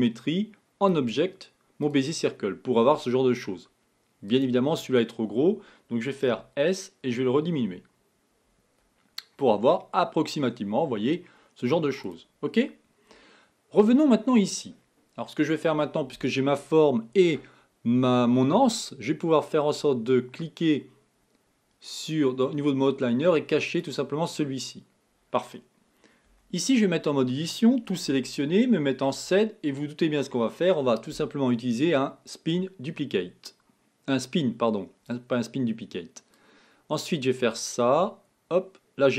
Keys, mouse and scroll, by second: 4.3 click, 6.4 s, 14.5 click, 24.0 click, 26.4 Tab, 27.9 a, 28.1 a, 29.2 KP_7, 32.3-35.4 drag, 36.6 click.